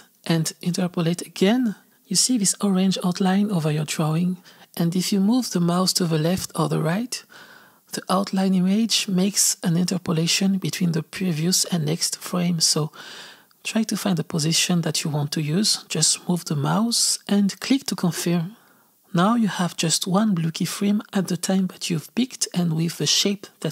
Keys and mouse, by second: 20.4-22.8 drag, 22.8 space, 23.6 space.